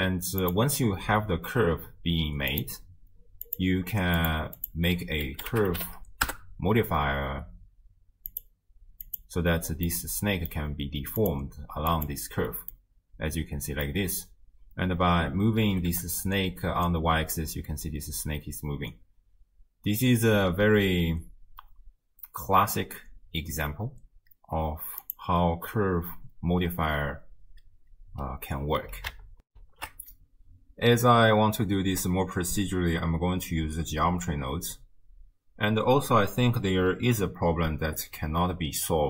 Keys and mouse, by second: 0.4 click, 3.5 click, 4.2 click, 4.7-6.3 drag, 10.0-10.5 middle drag, 11.4 click, 12.7-13.9 drag, 15.7 g, 29.5 ctrl+alt+shift+w, 29.6 ctrl+alt+shift+q.